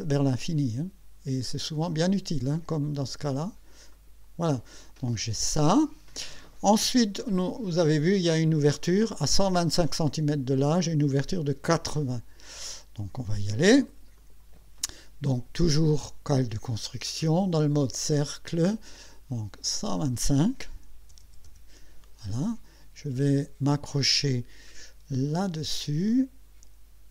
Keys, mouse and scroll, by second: 1.5 click, 3.9 click, 7.4 click, 14.2 click, 18.1 click, 19.7 click, 21.0 KP_1, 21.2 KP_2, 21.5 KP_5, 24.0-24.3 scroll up 2, 24.5 scroll down 2.